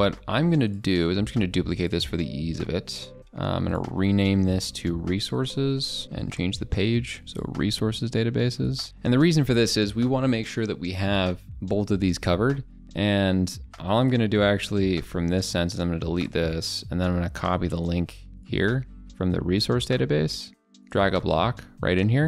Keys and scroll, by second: 5.9 ctrl+BackSpace.